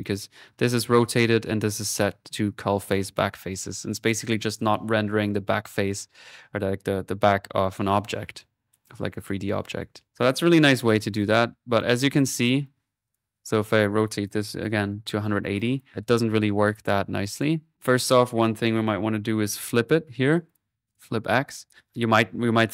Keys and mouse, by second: 0.0 click, 0.8 middle click, 1.3 click, 7.7-8.7 drag, 10.6-12.9 drag, 13.0-14.3 drag, 15.6 click, 17.0 middle click, 17.3 click, 17.7 right click, 18.2-19.8 typing, 18.3 click, 20.8 click, 21.7 middle click.